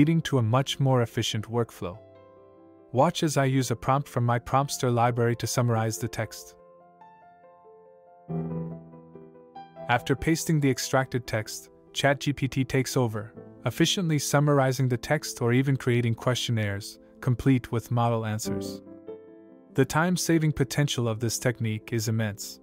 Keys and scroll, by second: 11.0 ctrl+v.